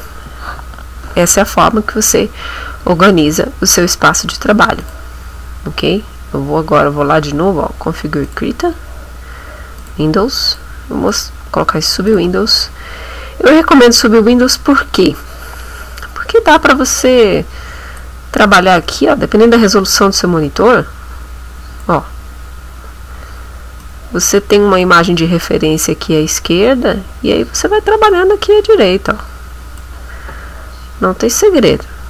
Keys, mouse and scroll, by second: 4.8 click, 8.3 click, 9.8 click, 10.5 click, 11.1 click, 12.1 click, 16.5-18.2 drag, 20.5-22.0 drag, 23.8-25.0 drag, 27.7-28.0 scroll up 1, 29.1 click, 31.7-32.0 middle drag.